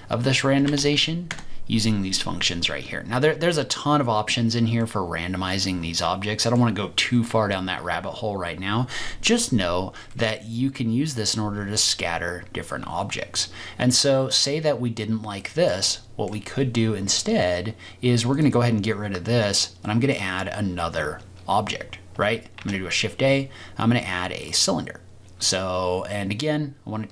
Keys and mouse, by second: 0.9 KP_6, 4.8-6.5 middle drag, 10.1-11.1 middle drag, 15.4 middle click, 15.9-16.2 shift+middle drag, 19.8 middle click, 22.5 shift+a.